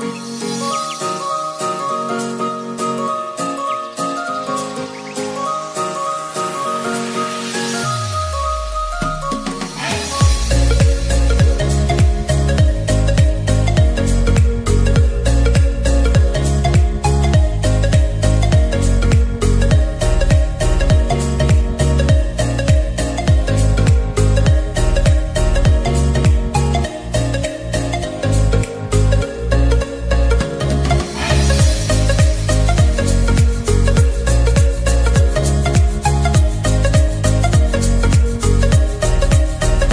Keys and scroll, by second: 5.1 ctrl+z, 19.0 ctrl+z, 31.9 ctrl+z.